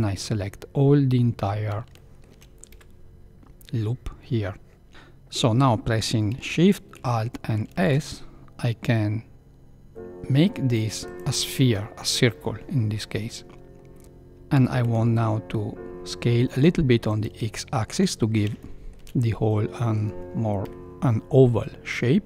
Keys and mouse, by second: 1.9 shift+middle click, 2.7 KP_Decimal, 7.6 alt+shift+s, 14.0-14.5 middle drag, 14.5 s, 17.5 shift+middle drag, 18.5-18.9 shift+middle drag, 19.2 middle click, 20.6 KP_1.